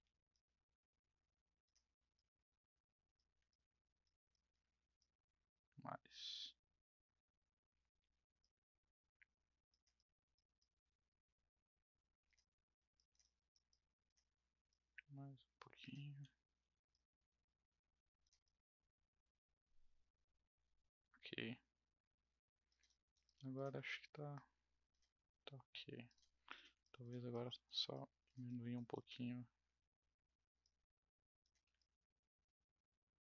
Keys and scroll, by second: 7.5 w, 7.9 r, 16.2 w, 16.6 r.